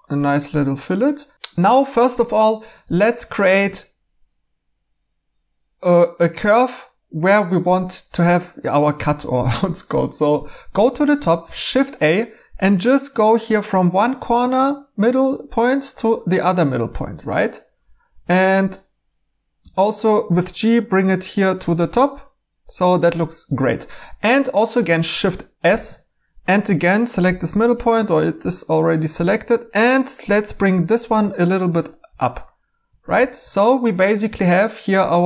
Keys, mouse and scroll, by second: 11.5 a, 16.1 middle click, 19.6 g, 21.1 middle click, 25.6 s, 27.2 g, 33.3 2.